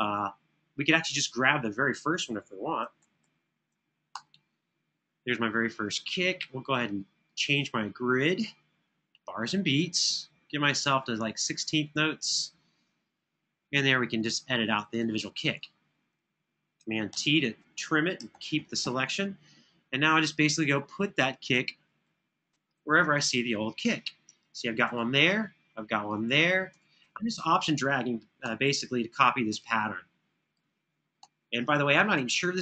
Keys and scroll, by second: 2.7 super+], 3.0 super+], 3.9 Return, 16.8 super+t, 18.0 super+[, 18.4 super+[, 22.5 super+], 22.8 super+], 28.1 Right, 30.9 Right.